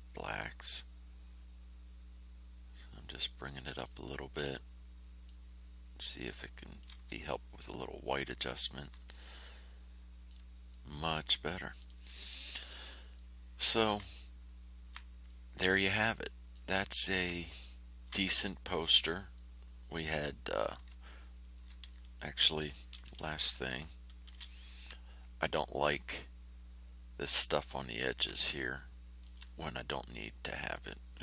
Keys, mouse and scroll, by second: 5.2-7.0 drag, 7.8 ctrl+scroll down 2, 8.4 ctrl+scroll up 2, 9.1 ctrl+click, 9.3-10.4 ctrl+middle drag, 10.7 middle click, 11.7 click, 13.1 middle click, 14.2 ctrl+scroll up 2, 15.6 click, 16.1 middle click, 17.7 ctrl+scroll down 2, 18.4 ctrl+middle click, 19.3 middle click, 20.4 middle click, 21.1-21.6 ctrl+scroll up 2, 21.8 ctrl+middle click, 24.2 shift+h, 25.5 ctrl+scroll down 2, 26.3 ctrl+scroll up 2, 29.2 ctrl+middle click, 29.8 ctrl+click.